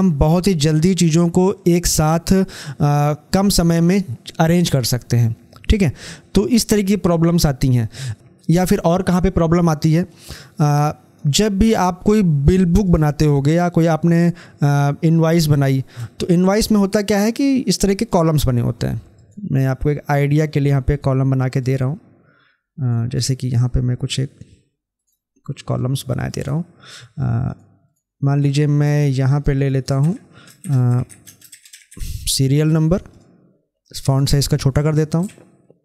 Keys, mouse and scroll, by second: 8.1-9.6 drag, 9.9 click, 10.1-11.5 drag, 17.0-22.8 drag, 22.8 right click, 24.0 click, 24.9 right click, 25.9 click, 26.2 right click, 27.5 click, 29.2 right click, 29.6 click, 31.2 space, 31.4 shift+n, 33.0-35.8 drag.